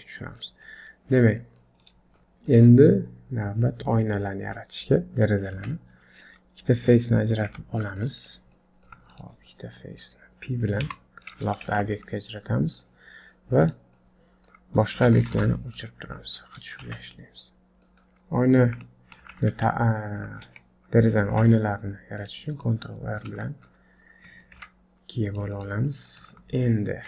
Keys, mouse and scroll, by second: 0.0 middle click, 0.7 middle click, 1.1-1.4 scroll up 1, 1.4 middle click, 1.8 click, 2.2 scroll down 4, 2.5 middle click, 4.1 scroll up 2, 5.6 Tab, 6.1 middle click, 7.5 3, 7.8 middle click, 8.2 click, 8.6 middle click, 9.1 shift+click, 9.6 scroll down 3, 9.8 middle click, 10.9 p, 11.8 Tab, 12.0 middle click, 13.6 click, 14.0 middle click, 15.3 shift+h, 15.8-17.4 scroll up 5, 16.2 middle click, 16.9 Tab, 17.4 middle click, 18.0-18.8 scroll down 2, 19.3 ctrl+t, 20.4 Escape, 21.3 ctrl+r, 23.0 middle click, 23.5 shift+middle click, 24.6 ctrl+r, 25.9 middle click, 26.3 shift+middle click.